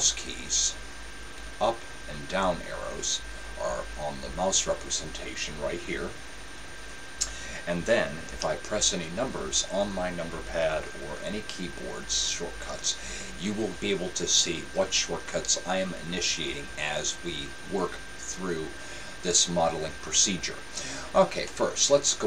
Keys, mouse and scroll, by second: 0.1-1.8 right drag, 1.2-4.0 middle drag, 8.8 KP_7, 10.7 KP_1, 11.2 KP_3, 12.1 KP_1, 21.6-22.2 middle drag.